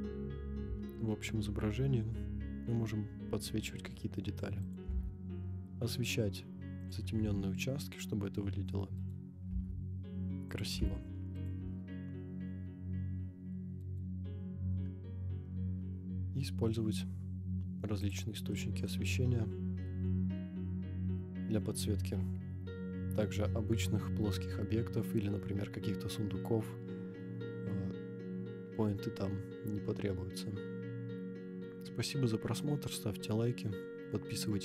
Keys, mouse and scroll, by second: 0.6 g, 0.6 z, 4.7 click, 4.8 g, 6.9 click, 7.1 g, 7.1 y, 9.0 click, 9.0 right click, 9.5 g, 10.6 click, 10.7 g, 10.8 x, 11.5 click, 11.6 g, 11.7 y, 13.8 right click, 14.4 scroll down 2, 15.1 scroll up 1, 16.3 scroll up 1, 16.4-17.1 middle drag, 17.1-17.5 scroll down 1, 18.0 click, 18.5-18.8 middle drag, 19.0 scroll down 2.